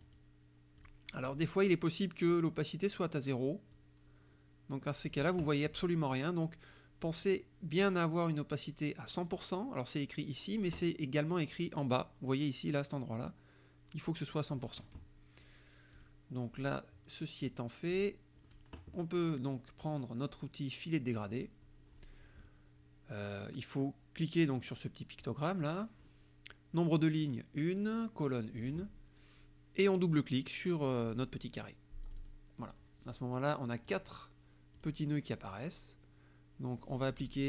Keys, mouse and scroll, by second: 0.1 click, 0.8 click, 3.8-5.4 drag, 7.9-9.6 drag, 16.0 click, 17.5 click, 18.0 click, 21.2 click, 25.2 click, 32.1 click, 33.9 click, 34.8 click.